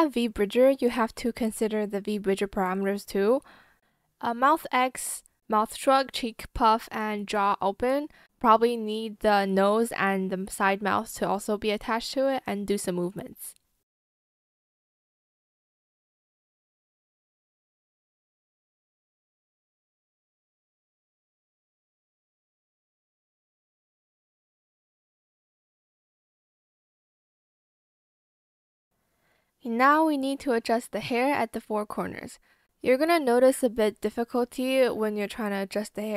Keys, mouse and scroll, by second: 1.3 alt+click, 1.8 shift+click, 4.0 shift+click, 5.0 shift+click, 5.4 shift+click, 7.6 shift+click, 8.1 shift+click, 8.6 ctrl+z, 12.1 shift+click, 13.9 shift+click, 14.4 ctrl+z, 18.8 ctrl+z, 19.8 ctrl+click, 20.5 shift+click, 20.5 Escape, 21.2 ctrl+click, 21.8 Escape, 23.9 click, 23.9 b, 24.5 ctrl+z, 25.4 ctrl+z, 26.8 ctrl+z, 28.0 ctrl+z, 28.0 shift+click, 28.2 shift+click, 29.3 shift+click, 30.0 shift+click, 33.2 b, 33.4 click, 33.8 shift+click, 34.2 ctrl+z, 34.4 shift+click, 34.6 shift+click, 35.0 shift+z, 35.1 shift+click, 35.3 shift+click.